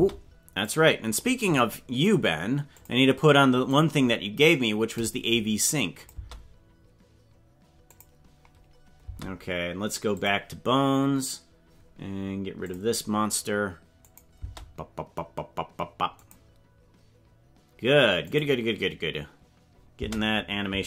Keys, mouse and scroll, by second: 0.0 space, 0.6 click, 1.6 click, 2.7 click, 6.1 click, 6.1 space, 8.0 click, 9.1 space, 10.1 click, 12.7 click, 14.1 click, 14.4 space, 16.2 click, 18.3 click, 20.0 space.